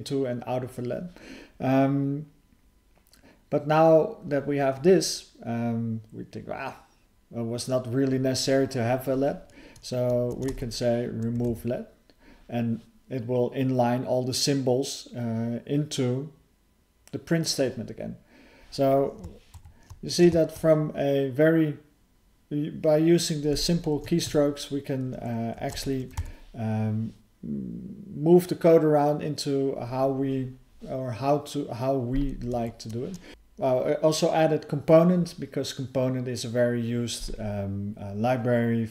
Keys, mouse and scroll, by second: 19.6 ctrl+_, 24.2 Tab, 32.5 alt+f, 33.3 ctrl+_, 33.3 Return, 33.3 ctrl+k, 33.3 ctrl+s, 33.3 BackSpace.